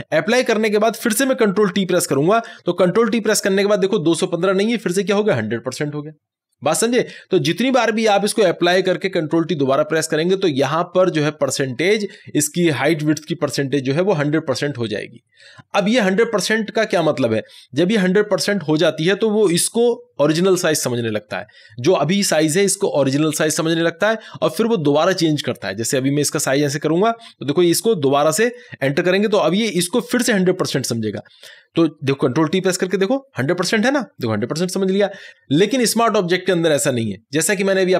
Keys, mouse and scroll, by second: 1.9 click, 2.3 ctrl+t, 26.6-29.3 drag, 32.3 click, 32.7 ctrl+t.